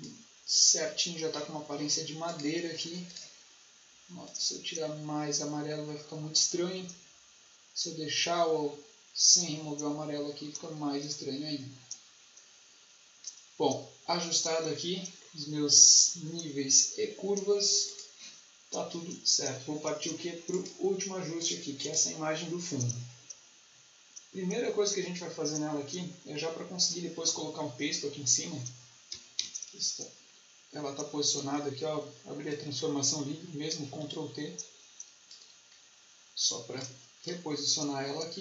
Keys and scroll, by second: 29.3 ctrl+t.